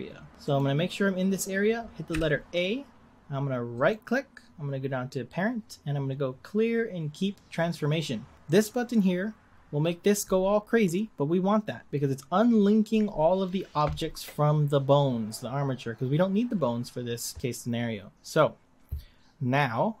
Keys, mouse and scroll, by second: 0.4 click, 2.1 a, 3.7-6.9 right drag.